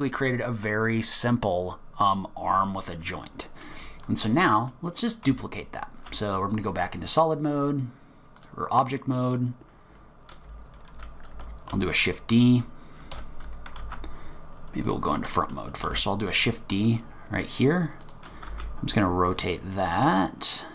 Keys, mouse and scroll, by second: 2.8-3.2 scroll up 3, 3.4-4.0 scroll down 3, 4.0 middle click, 4.0 scroll down 1, 5.3 z, 7.1 click, 9.2 click, 9.6-10.4 scroll up 5, 10.4-11.3 scroll down 4, 11.3 scroll down 1, 11.5 shift+d, 13.8 ctrl+z, 14.8 click, 15.9 shift+d, 18.5 r.